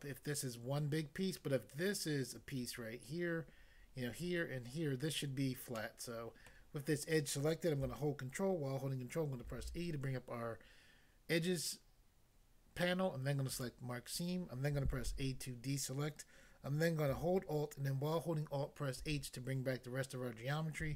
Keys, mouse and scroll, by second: 5.8 middle click, 6.5 middle click, 9.5 ctrl+e, 13.6 click, 13.7 click, 15.1 a, 19.0 alt+h.